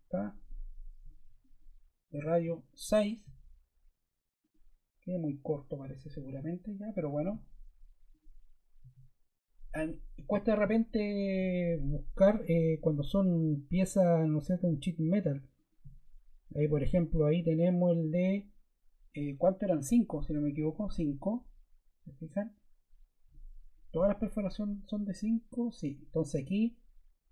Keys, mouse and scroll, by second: 2.3 6, 11.1 click, 15.5 click, 20.6 5, 20.7 Return.